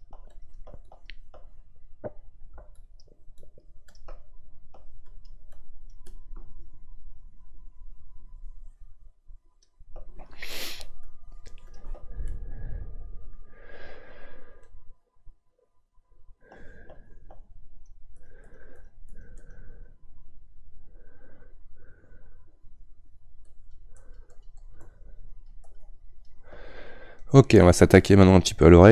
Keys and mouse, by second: 12.2-17.7 middle drag, 17.7-27.2 shift+drag, 27.2-28.9 middle drag.